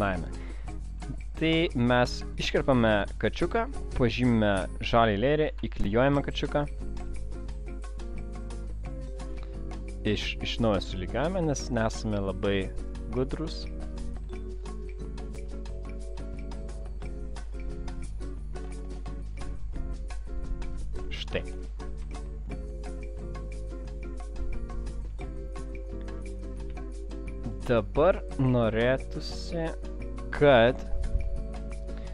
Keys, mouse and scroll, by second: 2.5 click, 3.3 ctrl+x, 10.7 click, 14.8 click, 17.2 alt+scroll up 1, 18.2 alt+scroll up 1, 21.2-22.0 alt+scroll down 1, 22.0-23.1 alt+scroll down 1, 25.2-26.0 alt+scroll down 1, 26.0 alt+scroll down 1.